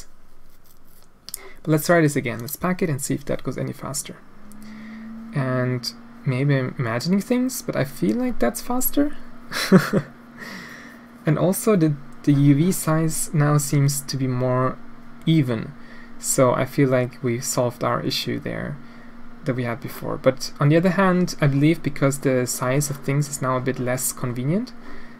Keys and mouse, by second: 2.3-25.1 drag.